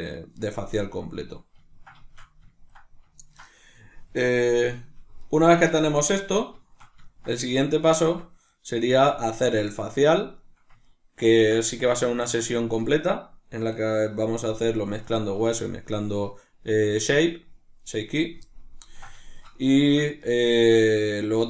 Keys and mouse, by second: 8.0 Tab, 11.6-16.5 shift+middle drag, 18.4-20.3 ctrl+middle drag, 20.5-21.4 shift+middle drag.